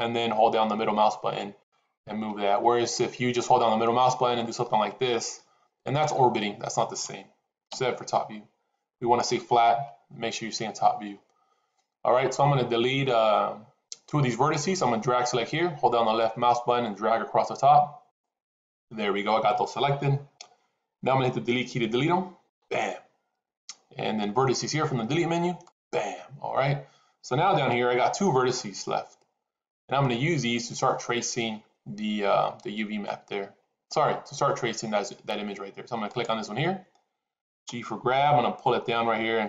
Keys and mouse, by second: 3.7-6.9 middle drag, 7.6 KP_7, 15.0-18.2 drag, 22.3 Delete, 27.6 shift+middle click, 36.0 click, 37.6 g.